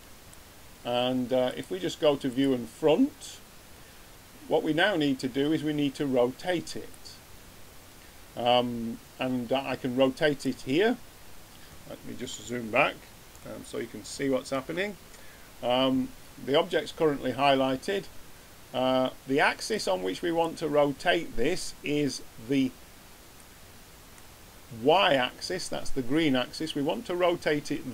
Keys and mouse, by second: 1.4-3.3 drag, 6.8-8.6 drag, 11.9-14.9 middle drag, 19.6-21.5 drag, 23.3-25.2 middle drag.